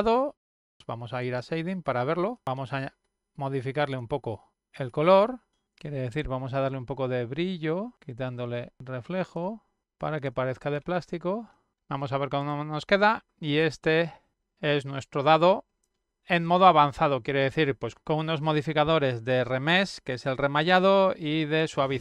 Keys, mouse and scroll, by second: 1.2 click, 2.5 middle click, 3.8 ctrl+middle click, 5.3 click, 6.5 click, 7.6 click, 8.6 middle click, 8.6 scroll down 1, 8.9-9.3 middle drag, 9.5 middle drag, 10.3 click, 11.0 middle click, 11.5 click, 12.6-15.4 middle drag, 16.6-22.0 middle drag.